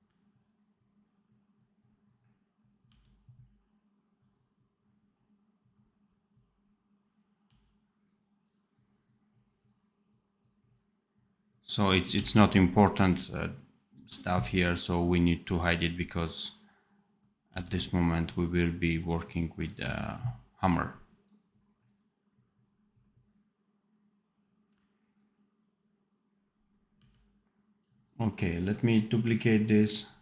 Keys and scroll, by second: 2.8 d, 7.3 d, 12.0 d, 17.4 d, 19.7 d, 26.8 d.